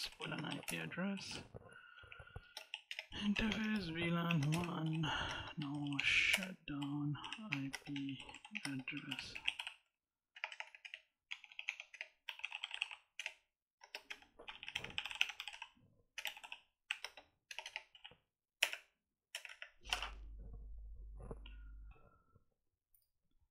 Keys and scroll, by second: 0.0-10.2 typing, 1.8 Tab, 4.3 Return, 6.2 Return, 8.4 Tab, 11.1 Tab, 11.7-17.7 typing, 18.4 Return.